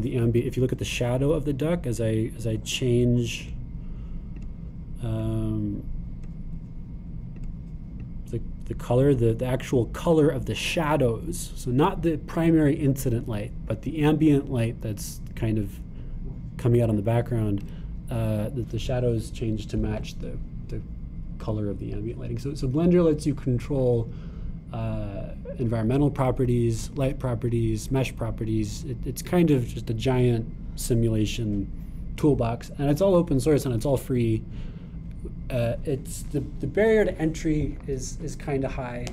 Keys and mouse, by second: 4.5 click, 6.2-8.4 drag.